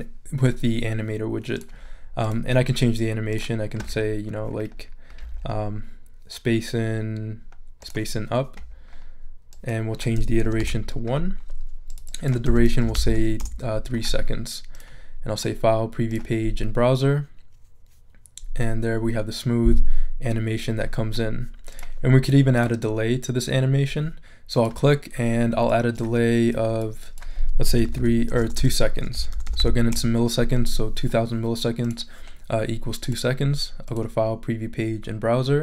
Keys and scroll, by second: 10.4 |, 10.6 Return, 12.4 3, 12.8 0, 13.4 Return, 27.4-29.8 typing, 29.9 Return.